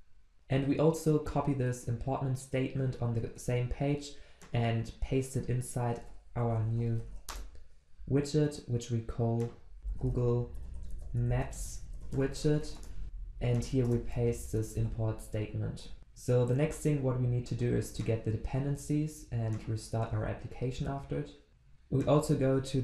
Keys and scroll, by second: 14.8 ctrl+v, 16.0 ctrl+s, 20.0 ctrl+F2.